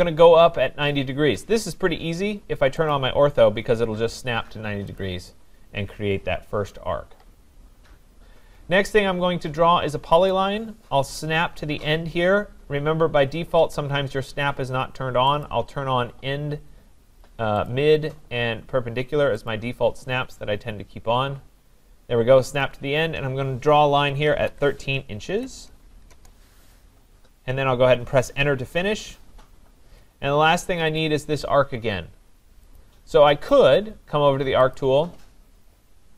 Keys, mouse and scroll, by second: 2.9 click, 5.0 click, 10.3 click, 15.5 click, 17.7 click, 19.5 click, 22.7 click, 24.0-25.8 typing, 26.1 Return, 28.8 Return, 31.0 click, 32.8 click, 34.8 click.